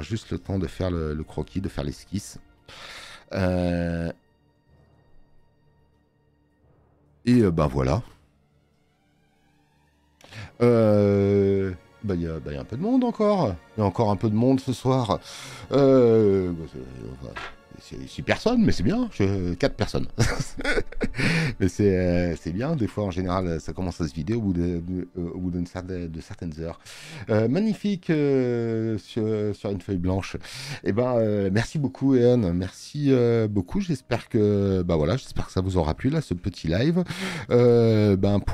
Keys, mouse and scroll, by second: 3.4 space, 3.5 click.